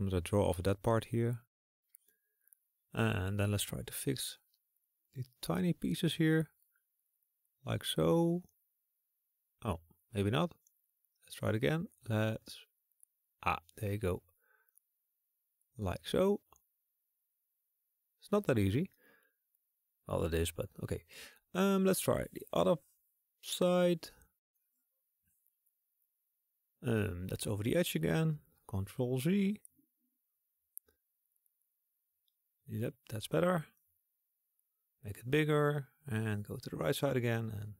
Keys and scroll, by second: 3.0 [, 27.6 typing, 28.2 ctrl+z, 34.0 ctrl+z, 34.2-34.5 typing.